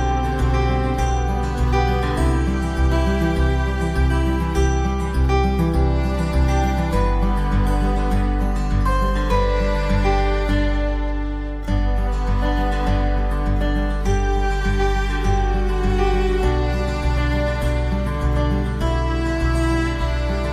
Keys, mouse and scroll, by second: 10.3-14.4 drag, 17.0 click, 18.2 click.